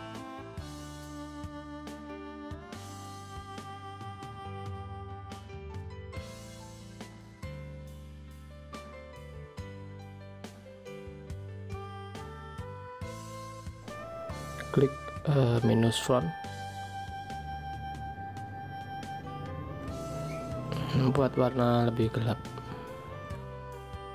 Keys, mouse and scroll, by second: 8.4 shift+click, 11.4 ctrl+click.